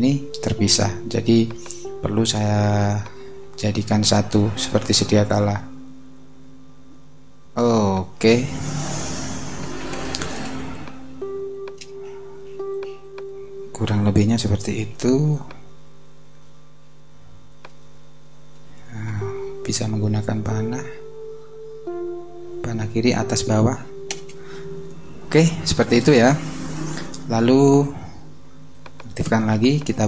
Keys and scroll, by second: 9.2 super+=, 10.5 super+space, 14.7 super+t, 19.5 Right, 24.1 Return.